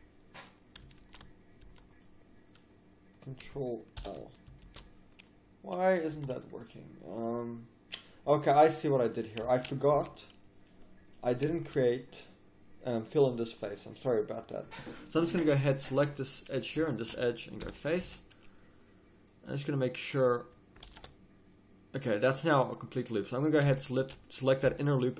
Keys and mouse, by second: 1.0 ctrl+z, 1.6 z, 4.0 ctrl+l, 4.7 ctrl+z, 6.1 z, 6.6 middle click, 7.0 click, 9.5-11.1 middle drag, 9.9 a, 17.7 f, 18.0 a, 18.5 middle click, 20.8 ctrl+r, 22.6 click, 24.7 z.